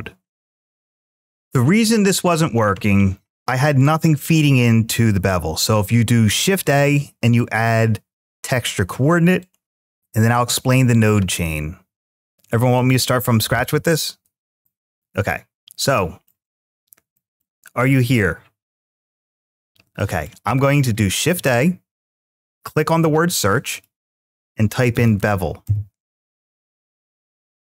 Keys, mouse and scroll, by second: 5.4-8.0 drag, 9.2 click, 12.6-15.8 drag, 15.8 middle click, 17.0-18.4 middle drag, 20.0-20.6 middle drag.